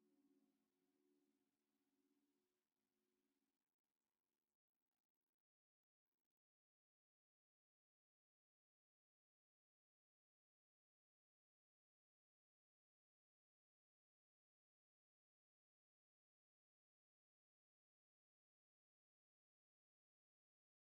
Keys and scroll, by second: 4.8 a.